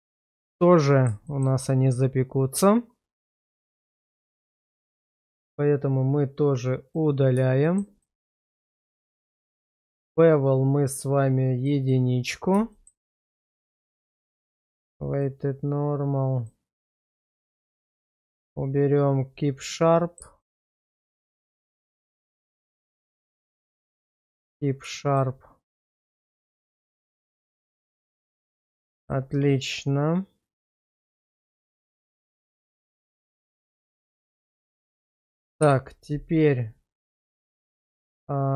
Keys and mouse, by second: 1.2 shift+middle click, 1.6-4.5 middle drag, 4.7 shift+middle click, 6.8 click, 7.6 shift+middle drag, 8.0 middle click, 10.0 click, 11.6 click, 11.8 click, 12.7 shift+middle drag, 15.1 click, 16.4 click, 17.5 click, 18.0 click, 19.6-20.2 middle drag, 20.4 shift+middle click, 20.8-23.5 middle drag, 23.8 shift+middle drag, 24.9 shift+middle drag, 25.6-26.3 middle drag, 26.6 shift+middle drag, 28.4 middle drag, 28.9 shift+middle click, 29.3-31.3 middle drag, 31.5 shift+middle click, 32.2 /, 33.8 shift+middle drag, 34.5-35.0 middle drag, 35.6 /.